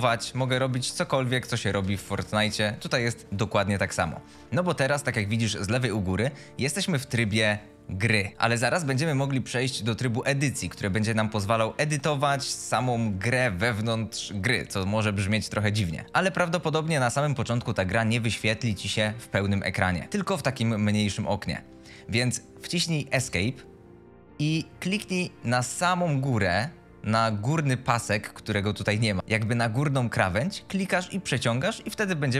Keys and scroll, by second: 6.9 s, 7.2 d, 13.2 w, 18.8 a, 23.0 Escape.